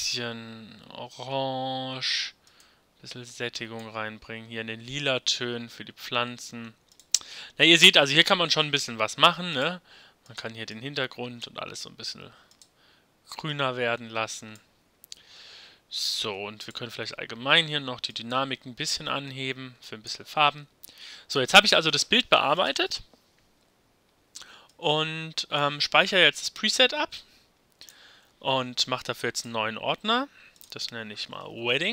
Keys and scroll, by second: 31.1-31.9 typing.